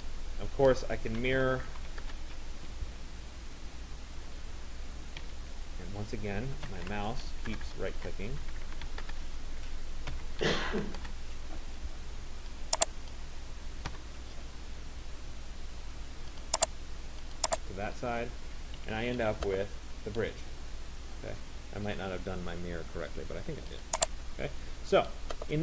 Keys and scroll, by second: 1.9 Return, 5.4 Escape, 7.7-9.6 typing, 22.8 Escape.